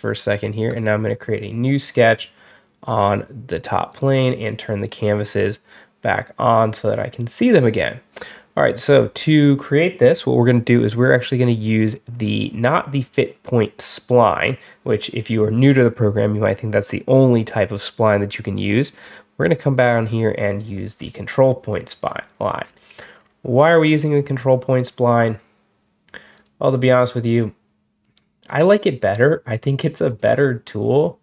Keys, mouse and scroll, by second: 0.5 click, 1.7 click, 3.8 click, 17.2 click, 18.8 click, 19.9 click, 20.8 middle click, 21.6 middle click, 21.7 scroll down 1, 22.0 scroll up 1, 22.5-23.3 scroll down 2, 24.3 click, 26.2 click, 28.5 click, 29.9 click.